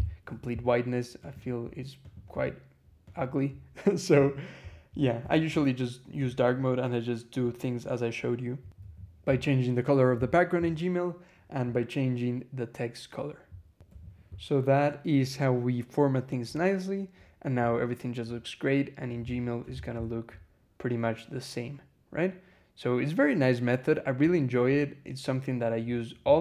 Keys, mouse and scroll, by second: 1.1 click, 1.9 click, 2.9 click, 3.6 scroll down 2, 4.1 scroll up 2, 4.8 scroll down 2, 8.6 e, 10.5-10.9 scroll up 2, 13.7 e, 15.5 scroll down 2, 16.5-16.9 scroll down 2, 17.5 scroll down 2, 18.2-18.7 scroll down 2, 19.4 2.